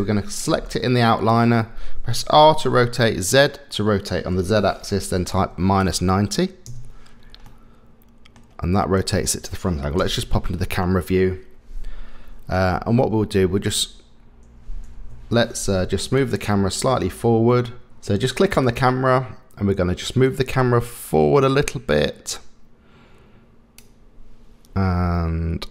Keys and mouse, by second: 2.3 r, 7.5 middle click, 8.8 middle click, 10.0 KP_0, 13.3 shift+`, 16.2 click, 18.6 click, 20.3-23.8 drag.